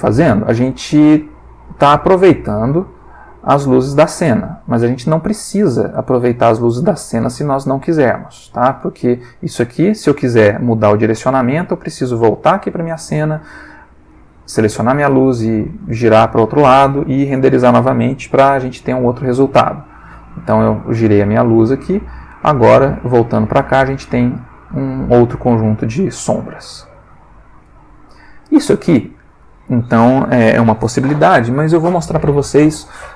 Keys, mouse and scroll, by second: 0.8-5.6 drag, 5.9 click, 10.8 ctrl+middle click, 12.8 click, 14.1 click, 14.7 r, 15.8 click, 18.4 F12, 21.2 Escape, 22.9 click, 26.6 middle click, 28.5 click, 29.3-29.9 drag.